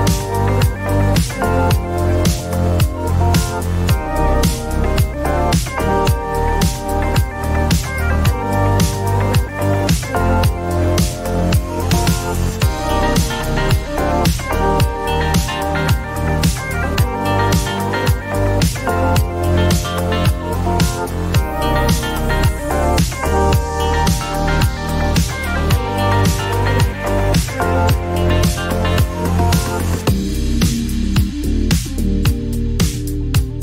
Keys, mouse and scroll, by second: 1.5 click, 3.0 click, 4.2 click, 7.9 alt+click, 9.8-11.0 typing, 12.9 click, 13.0 click, 13.9-16.7 typing, 19.6 Return, 22.6 click, 26.7 right click, 29.5 click, 32.9 click.